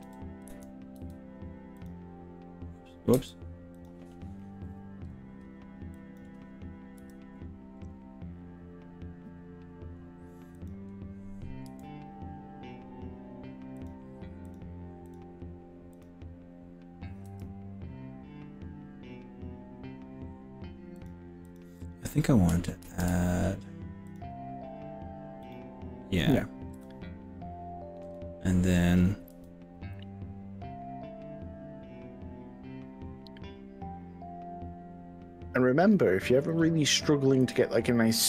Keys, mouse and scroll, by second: 0.0 KP_3, 0.5 KP_1, 1.1 z, 3.1 z, 5.9-6.3 drag, 7.1 g, 10.7 click, 11.7 r, 13.7 r, 13.9 click, 14.5 click, 15.1 click, 15.9 click, 17.3 g, 21.0 click, 21.5 click, 22.8 ctrl+r, 25.5 right click, 26.9 g, 29.3 s, 36.5 click, 36.9 click, 37.5 s.